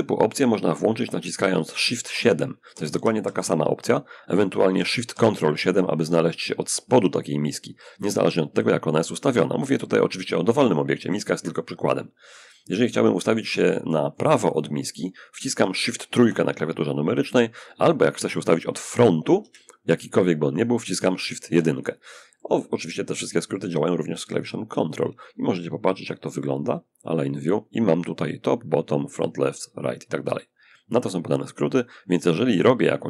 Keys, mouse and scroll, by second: 1.3 shift+7, 2.0 shift+7, 2.2 shift+7, 4.4 ctrl+7, 10.3-14.7 drag, 15.4 shift+3, 18.6 1, 21.6-23.7 middle drag, 24.0 click.